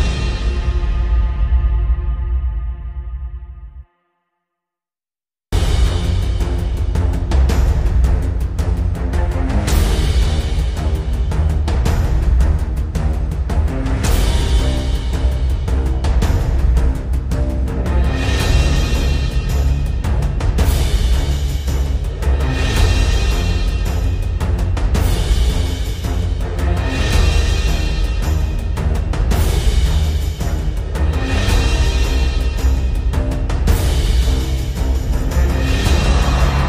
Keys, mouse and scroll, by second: 0.0 p, 1.8 click, 4.8 shift+click, 10.0 scroll down 1, 12.8 shift+click, 16.5 ctrl+r, 17.8-20.1 drag, 26.3 shift+click, 28.6 shift+click, 32.1 click, 33.9 ctrl+r, 34.8 right click.